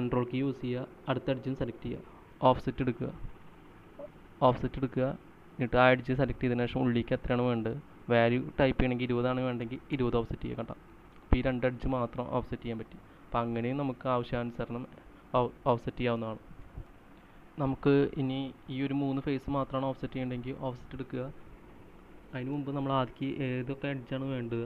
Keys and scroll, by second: 9.9-10.9 typing, 15.6 typing, 17.7 space, 17.7 c, 23.2 space.